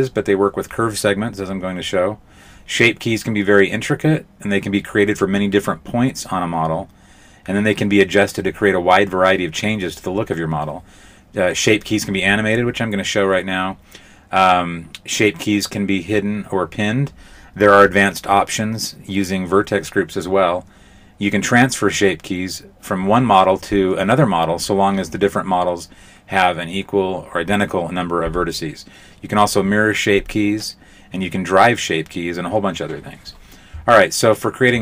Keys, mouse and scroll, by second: 4.0 r, 9.8 KP_5, 10.2 z, 10.9 z, 11.4 Tab.